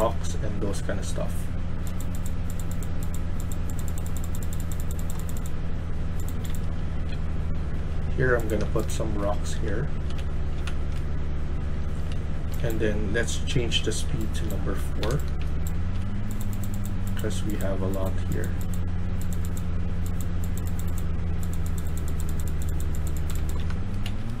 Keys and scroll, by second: 0.0-0.3 typing, 6.1-7.5 typing, 8.5-8.8 typing, 10.0-12.0 typing, 13.3-15.8 typing, 23.0-24.4 typing.